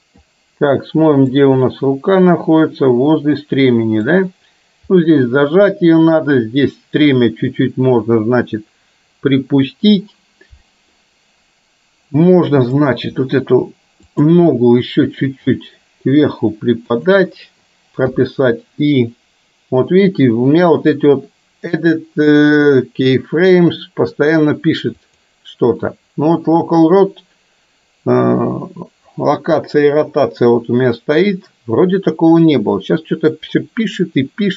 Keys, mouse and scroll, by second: 1.6-4.0 middle drag, 14.1 click, 15.1 r, 18.1 i, 25.0-30.9 drag, 32.5-34.5 drag.